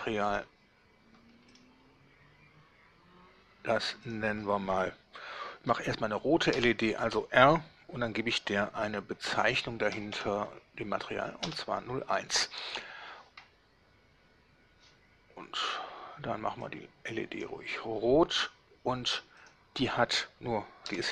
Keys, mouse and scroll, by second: 0.4 click, 1.6 click, 4.2 click, 6.6 shift+r, 10.1 0, 10.2 1, 11.6 Return, 15.8 click, 16.8 click, 19.5 click, 21.0 ..